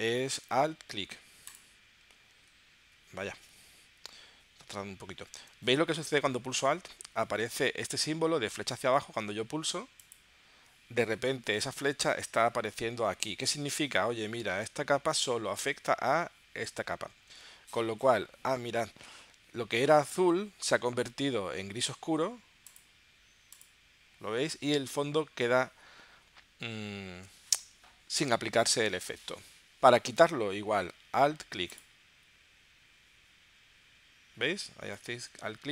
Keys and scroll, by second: 5.2 super+z.